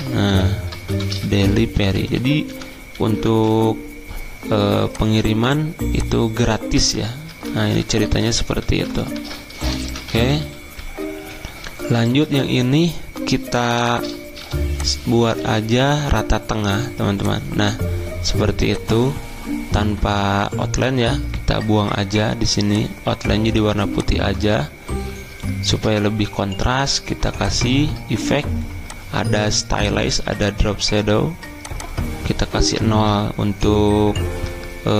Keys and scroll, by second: 0.0-4.0 typing, 6.2-9.2 typing, 8.0 Up, 10.4-12.1 typing, 11.2 shift+Escape, 15.2-16.0 typing, 17.3-19.0 typing, 34.4 0.